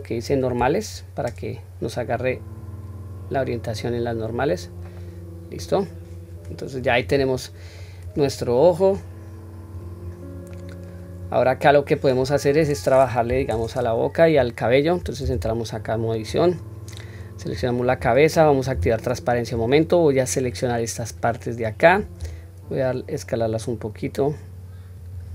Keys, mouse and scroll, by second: 2.6-4.2 drag, 4.6-5.4 scroll down 2, 5.0-5.7 middle drag, 6.0-6.6 scroll up 2, 6.5 click, 6.9-7.8 middle drag, 8.0 click, 8.9 click, 9.5 click, 10.5 middle click, 10.5 scroll down 2, 11.2-11.7 scroll up 1, 11.7 scroll down 1, 12.5 click, 13.3 KP_1, 14.3-14.7 scroll down 1, 15.2 Tab, 15.8-16.3 scroll down 1, 16.3-16.7 scroll up 1, 17.4-18.3 scroll up 1, 18.7 q, 20.1 click, 22.2 s.